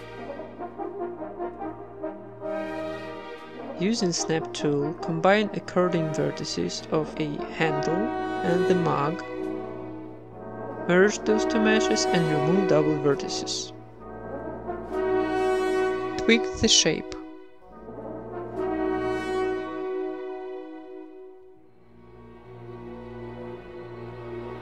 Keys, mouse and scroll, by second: 0.0-1.9 typing, 0.1 middle click, 0.2 click, 0.2 right click, 0.4 ctrl+Tab, 0.5-1.6 right drag, 1.3 middle click, 1.6 right click, 2.2 click, 2.6 right click, 2.9 right click, 3.0 j, 3.1 g, 3.4 right click, 3.4 g, 3.7 g, 4.0 middle click, 4.3 Tab, 4.3-5.3 right drag, 4.5 Tab, 4.8 x, 5.0 Tab, 5.3 Tab, 5.9-9.4 typing, 6.0 right click, 6.2 click, 6.3 middle click, 6.5 right click, 6.6 click, 7.3 middle click, 7.6 click, 7.6 right click, 7.9 ctrl+z, 8.2 right click, 8.5 ctrl+z, 8.7 middle click, 8.8 click, 8.8 right click, 9.2 middle click, 9.6 Tab, 9.8 right click, 10.1 ctrl+j, 10.3 Tab, 10.7 a, 10.9 a, 11.0 w, 11.5 middle click, 12.0 Tab, 13.8-14.8 drag, 14.0-15.8 middle drag, 14.2 z, 15.2-16.6 drag, 16.0 middle click, 16.5 Tab, 17.1 ctrl+r, 17.6 right click, 17.8-24.6 typing, 18.1 right click, 18.3 Tab, 18.6 Tab, 19.0 ctrl+r, 19.0 middle click, 19.2 right click, 20.1 Tab, 20.1 Tab, 20.5 right click, 20.6 Tab, 20.7 middle click, 20.9 Tab, 22.1 Tab, 22.2 middle click, 22.9 Tab, 23.2 click, 24.4 click.